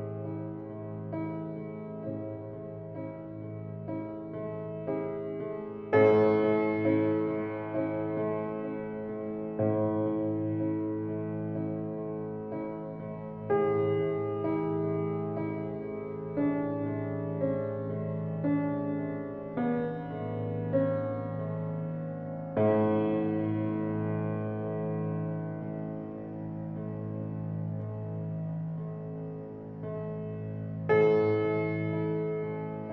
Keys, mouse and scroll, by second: 6.2 click, 7.3-13.5 middle drag, 19.4-19.9 scroll up 5, 20.8-26.9 middle drag, 27.1-28.1 scroll down 2, 28.1-32.9 middle drag.